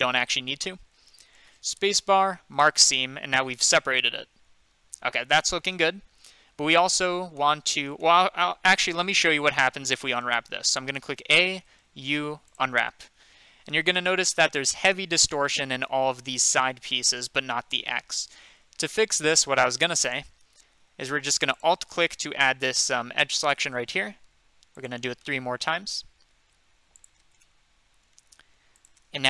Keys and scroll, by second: 0.1 ctrl+z, 2.5 Return, 10.7 a, 11.9 u.